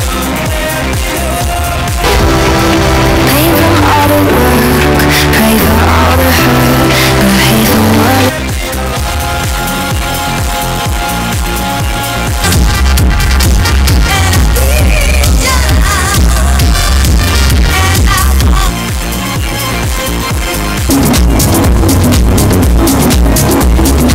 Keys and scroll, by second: 8.1 Page_Down, 18.7 Page_Down.